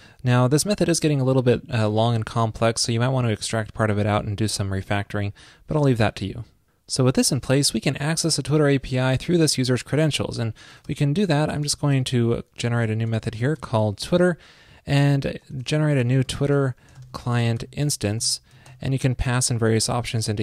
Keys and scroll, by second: 9.4 super+Down.